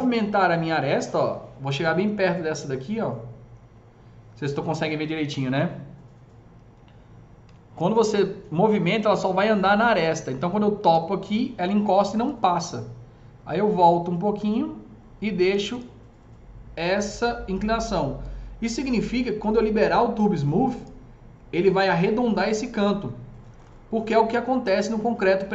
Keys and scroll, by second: 7.4 s.